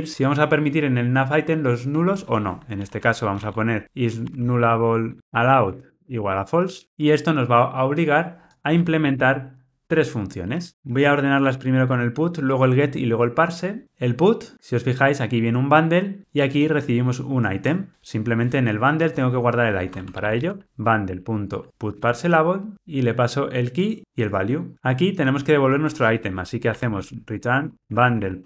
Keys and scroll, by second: 9.0 alt+Return, 10.6 shift+Down, 10.9 shift+super+Up, 20.9 Return, 22.7 Tab, 27.7 Return.